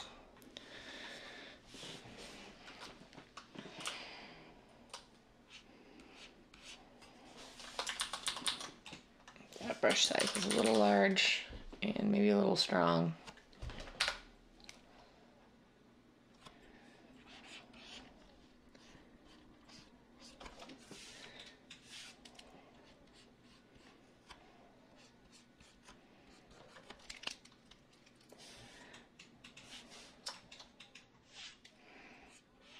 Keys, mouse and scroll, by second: 3.8-4.9 [, 8.0 ctrl+z, 8.2 ctrl+z, 8.4 ctrl+z, 9.9-10.6 typing, 14.0 Escape.